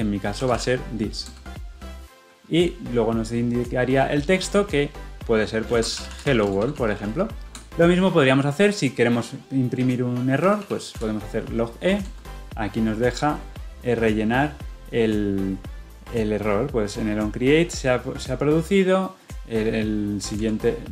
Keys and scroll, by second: 12.1 Return.